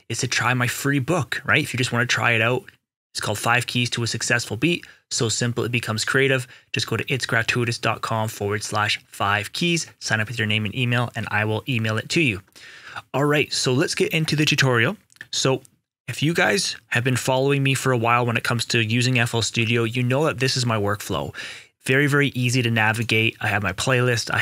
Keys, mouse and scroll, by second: 14.2 click, 14.7 right click, 22.9 right click, 23.4 click.